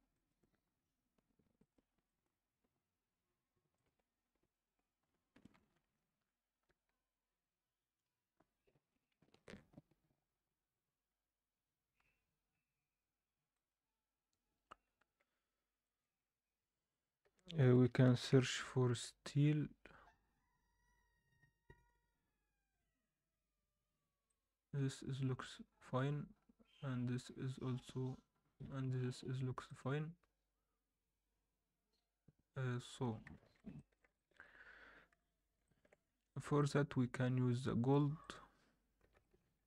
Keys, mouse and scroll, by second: 11.9 click, 11.9-14.0 scroll down 1, 14.0 click, 15.8 middle click, 16.9-19.9 drag, 18.0 e, 32.9-33.4 scroll down 2, 33.4 alt+a, 33.7 middle drag, 34.1 alt+shift+middle drag, 35.1 KP_7, 35.6 alt+shift+middle drag, 36.0-36.5 scroll up 1, 36.5 click, 36.5 scroll up 1, 38.2-39.6 drag.